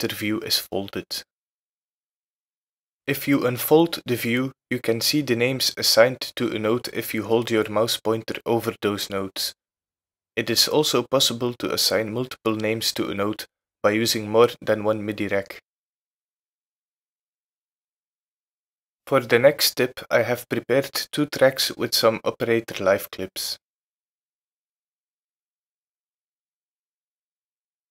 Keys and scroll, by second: 21.5 BackSpace.